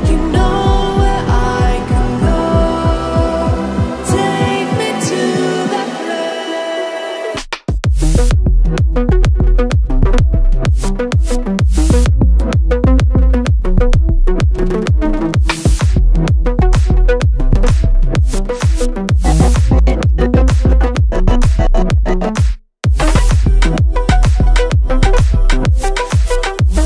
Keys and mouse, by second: 0.0-0.4 shift+middle drag, 1.1 x, 2.2 click, 4.9 click, 8.3 g, 8.3 x, 10.6 shift+click, 11.3 z, 14.7 click, 15.2 z, 17.1 shift+click, 18.6 z, 20.6 shift+click, 21.5 middle click, 22.3 shift+z, 24.5 g, 26.5 y.